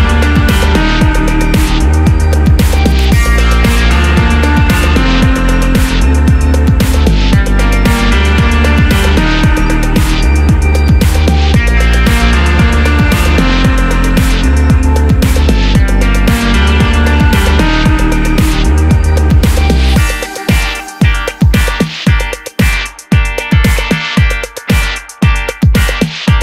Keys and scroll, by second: 15.7 super+d.